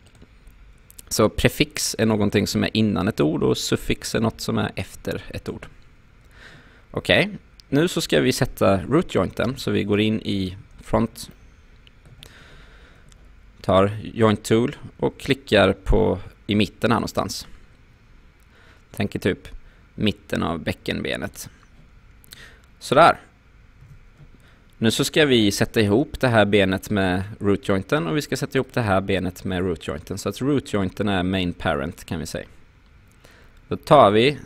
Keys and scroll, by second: 9.5 space, 23.8 q.